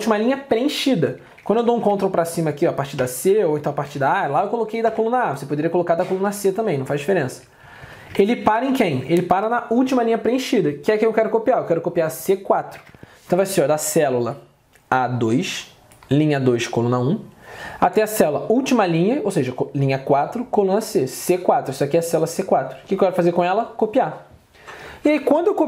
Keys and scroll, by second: 1.8 ctrl+Down, 3.1 ctrl+Up, 4.1 ctrl+Down, 4.9 ctrl+Up, 8.2 ctrl+Down, 8.5 ctrl+Up, 12.9 alt+Tab.